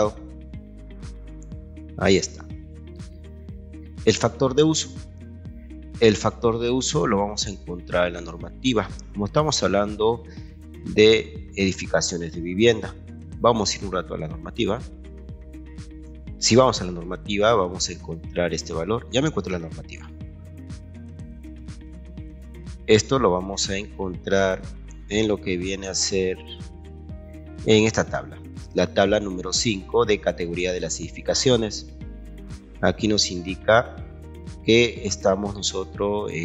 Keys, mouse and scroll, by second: 0.5-2.2 ctrl+drag, 3.0 Escape, 6.1 click, 8.5-10.5 scroll down 2, 12.7 click, 16.7-18.8 scroll up 12.